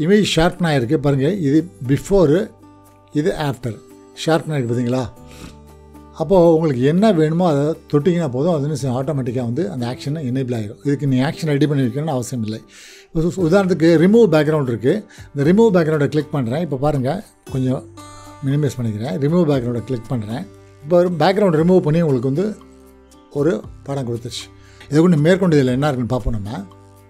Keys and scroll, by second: 18.7 ctrl+0, 25.4 ctrl+0, 26.2 ctrl+w.